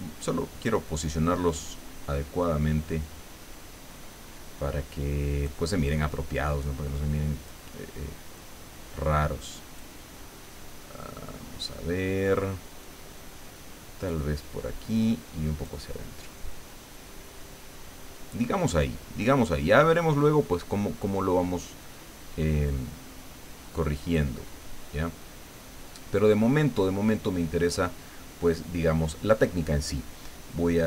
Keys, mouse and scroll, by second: 1.6-5.6 drag, 6.9 click, 8.4-10.0 drag, 12.8-14.3 drag, 14.9 click, 16.9-18.5 drag, 18.5-19.9 middle drag, 20.0 scroll down 1, 22.6-24.3 drag, 26.1 scroll up 1, 30.5-30.8 drag.